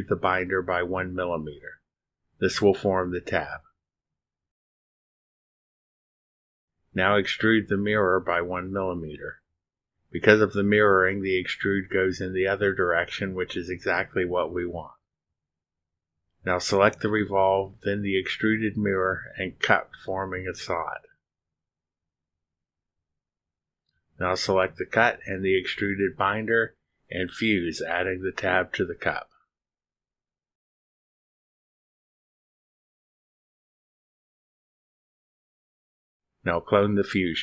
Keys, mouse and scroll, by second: 0.8-1.8 drag, 3.5 click, 4.5 1, 6.3 click, 9.0 click, 10.3 click, 11.7 1, 14.6 click, 16.5 click, 18.4 ctrl+click, 22.7 click, 25.9 click, 26.6 ctrl+click, 30.8 click, 31.6 click, 32.6 click, 34.2 click, 36.4 click, 37.0 click.